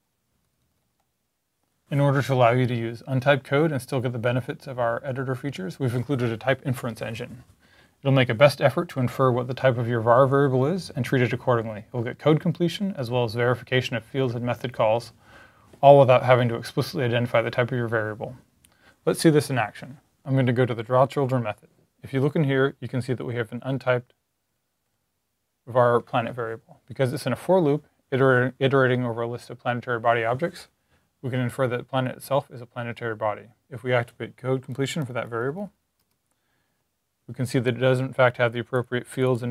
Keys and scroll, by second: 0.0 Left, 0.4 Left, 0.5 Left, 0.7 Up, 0.8 Up, 34.6 Down, 34.9 Left, 35.1 Left, 35.3 Left, 35.4 Left, 35.6 Left, 35.8 Left.